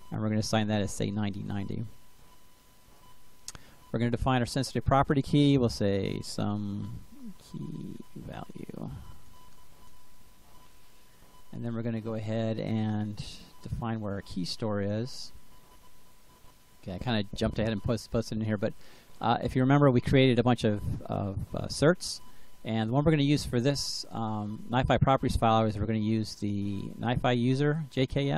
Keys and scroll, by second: 0.0-0.9 typing, 5.4-10.3 typing.